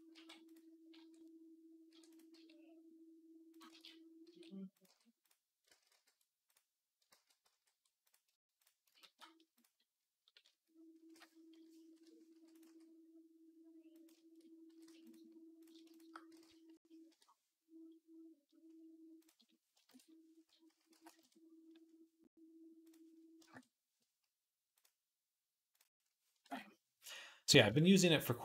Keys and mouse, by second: 0.0-2.2 typing, 3.5 ctrl+z, 4.1 s, 4.7 g, 5.2-14.2 middle drag, 5.5 ctrl+z, 5.7 ctrl+z, 6.9 ctrl+z, 7.3 ctrl+z, 8.9 shift+s, 10.3 a, 11.4 ., 12.2 e, 12.5 s, 14.2 shift+click, 14.3-15.7 middle drag, 14.5 g, 15.4 click, 15.7 shift+click, 15.9-19.1 middle drag, 19.1-24.6 drag, 20.5 s, 24.6 middle click, 25.5-28.4 drag.